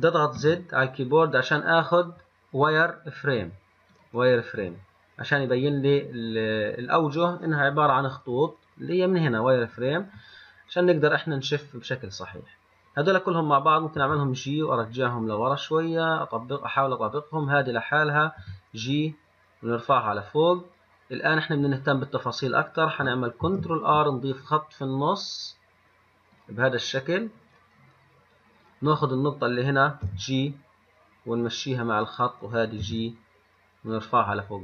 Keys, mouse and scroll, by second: 0.6 z, 14.2 g, 17.2 click, 18.6 g, 23.7 ctrl+r, 27.1-28.9 right drag, 28.9 click, 30.3 g, 32.3 click, 33.1 g.